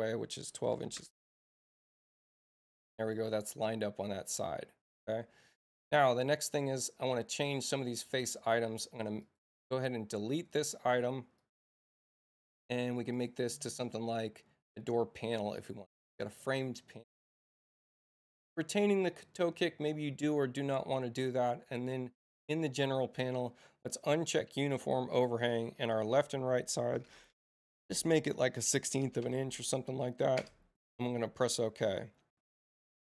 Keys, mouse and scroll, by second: 9.2 click, 10.3 click, 11.4 click, 12.4 click, 13.1 click, 14.7 click, 22.4 click, 24.1 click, 25.8 click, 27.7 Tab.